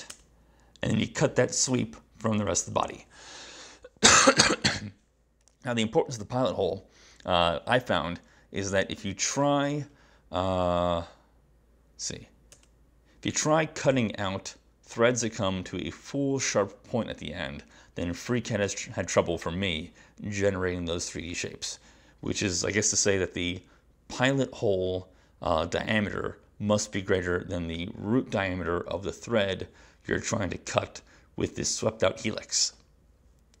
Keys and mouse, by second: 0.2 space.